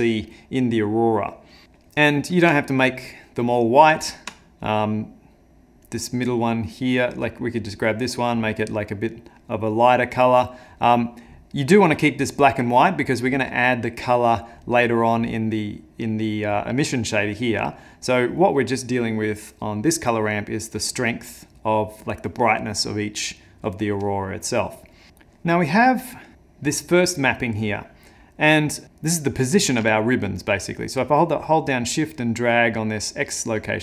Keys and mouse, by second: 3.0 ctrl+click, 4.6 ctrl+click, 5.9 click, 7.6 click, 14.7 click, 25.1 middle click, 26.1 middle click, 26.3 ctrl+middle click, 28.8 ctrl+z, 30.1 shift+click.